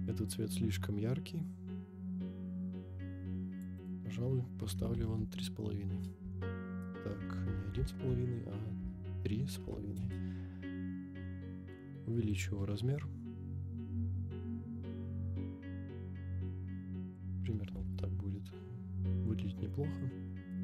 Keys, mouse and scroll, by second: 0.2-3.7 drag, 3.8-10.1 drag, 7.3 BackSpace, 12.3-17.4 drag, 17.7 g, 17.8 z, 20.5 right click.